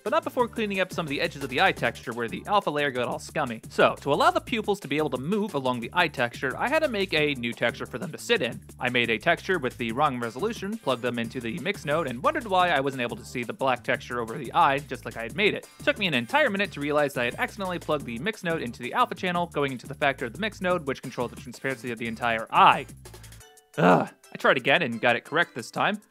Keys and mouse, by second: 0.9 x, 1.8-3.6 drag, 3.6 shift+a, 7.0 click, 8.1 middle click, 8.7 shift+Up, 8.7-9.9 shift+drag, 9.4 Return, 10.8 click, 11.9 ctrl+space, 14.8-15.3 drag, 16.8 ctrl+x, 18.3 middle click, 20.0-22.1 ctrl+z, 22.2 click, 22.7 ctrl+x, 23.1 click, 23.3 shift+a, 24.6 click.